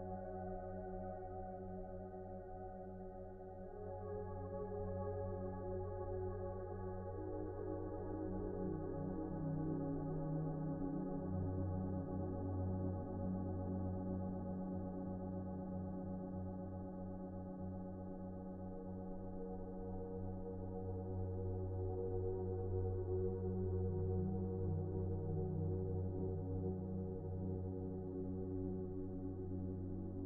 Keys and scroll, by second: 1.3 ctrl+z, 1.7 ctrl+z, 23.1 alt+x.